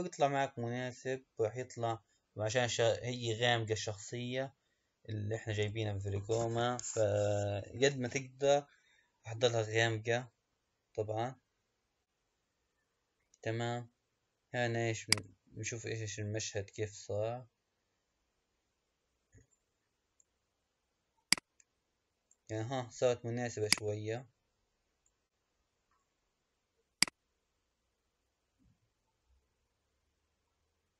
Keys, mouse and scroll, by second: 15.1 click, 21.2 click, 23.9 click, 27.0-30.2 drag.